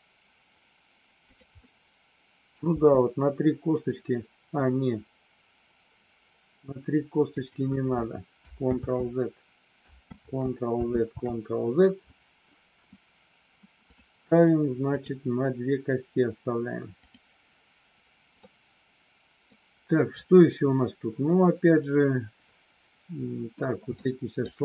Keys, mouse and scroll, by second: 1.2 click, 1.6 middle click, 2.4-2.8 scroll down 1, 2.8 g, 7.3 click, 8.8 ctrl+z, 10.2 ctrl+z, 14.8 click, 17.0 click, 18.4-19.4 middle drag, 23.9 shift+middle click.